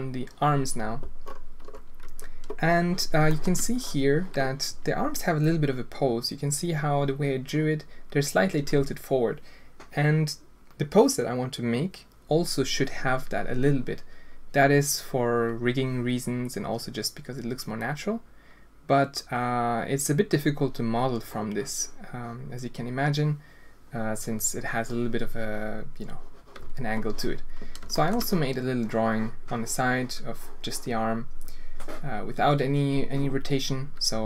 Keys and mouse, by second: 3.3 shift+drag, 27.9 shift+drag.